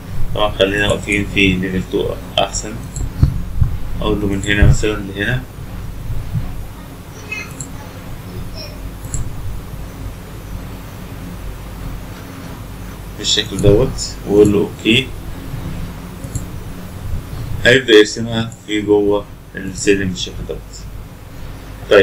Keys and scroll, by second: 0.0 Escape, 6.0 Escape.